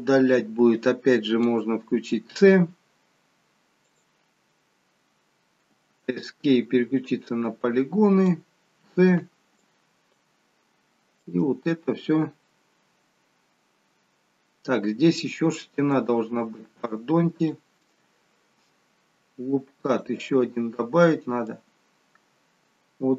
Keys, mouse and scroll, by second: 6.9 click, 8.8 c, 17.4 click, 19.8 click.